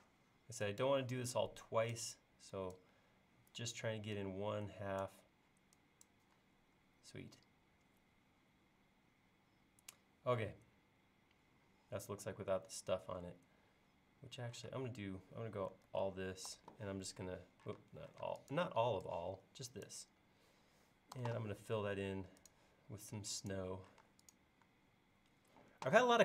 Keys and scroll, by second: 14.7 space, 15.9 super+a, 16.5 b, 17.8 space, 18.3 space, 21.2 b, 24.1 space.